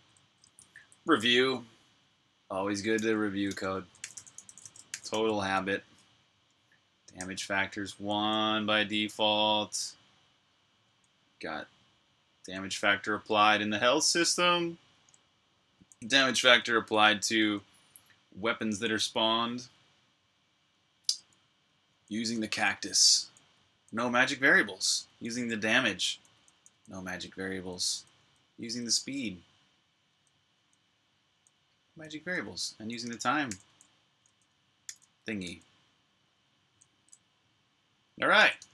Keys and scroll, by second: 0.0-0.9 typing, 3.0-7.9 typing, 10.6 typing, 15.5-17.2 typing, 18.5 shift+j, 21.7-28.4 typing, 29.9-32.6 typing, 34.0-35.2 typing, 37.9-38.7 typing.